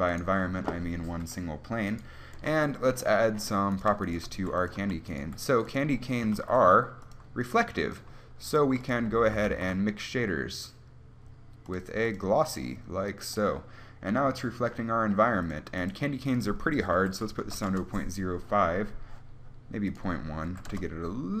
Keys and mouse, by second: 1.4 KP_1, 4.6 g, 4.9 a, 5.0 right click, 5.4 g, 6.6 shift+a, 8.8 g, 9.7-12.0 drag, 9.7 shift+a, 12.4 click, 12.8-14.9 drag, 17.6 click.